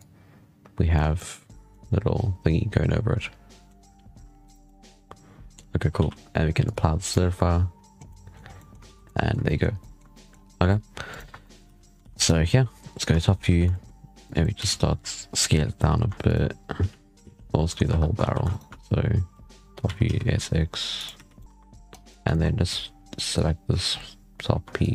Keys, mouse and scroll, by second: 1.0-1.4 middle drag, 1.4 scroll down 2, 1.5-3.7 middle drag, 3.7-4.3 scroll up 6, 4.3 right click, 4.5-5.8 middle drag, 5.8 alt+a, 6.5-7.9 drag, 7.9-8.2 middle drag, 8.2 scroll down 5, 8.4-8.7 middle drag, 8.7 alt+a, 8.8 scroll up 1, 8.9 middle drag, 9.2 scroll down 1, 9.3 scroll up 1, 9.3 shift+middle click, 9.5 scroll down 1, 9.6-10.2 middle drag, 10.2 scroll up 2, 10.9 right click, 11.1 Tab, 11.3 middle click, 11.5 z, 11.9 alt+a, 12.0 scroll down 6, 12.2 shift+middle click, 12.4 z, 13.0 shift+middle click, 13.2 scroll up 2, 13.3 z, 13.6 shift+middle drag, 13.8 scroll down 2, 14.1 click, 14.5 s, 16.7 z, 17.5 middle click, 17.8 3, 18.1 alt+a, 18.4 alt+shift+right click, 19.7 s, 21.0 z, 21.3 middle click, 21.4 1, 21.8 click, 22.2 shift+middle click, 22.3 scroll down 4, 23.8-24.1 scroll up 4, 24.7 click.